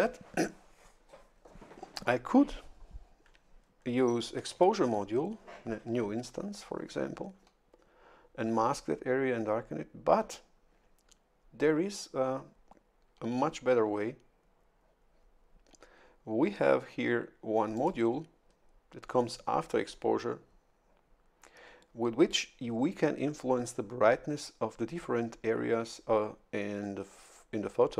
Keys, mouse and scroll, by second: 4.5 shift+F11, 17.7 click.